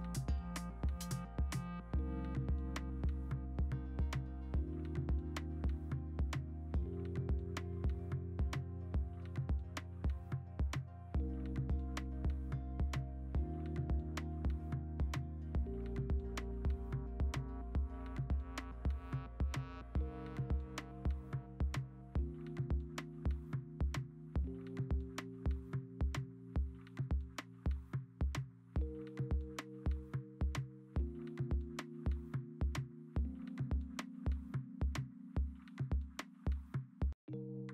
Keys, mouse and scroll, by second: 0.9 Delete, 1.1 ctrl+d, 1.6 e, 2.8 0, 3.9 ctrl+z, 5.1 ctrl+z, 5.6 b, 6.7 d, 9.2 ctrl+z, 10.6 ctrl+z, 11.6 ctrl+z, 11.9 i, 13.5 b, 13.9 ctrl+d, 15.7-17.4 drag, 17.0-18.0 typing, 18.7 ctrl+d, 19.6 v, 22.0 b, 22.8 ctrl+z, 25.4-26.5 typing, 28.0 v, 29.1 ctrl+t, 29.4 Escape, 29.5 Escape, 31.8-32.9 typing, 33.1 ctrl+z, 34.7 e, 35.8 ctrl+z, 37.4-37.7 typing.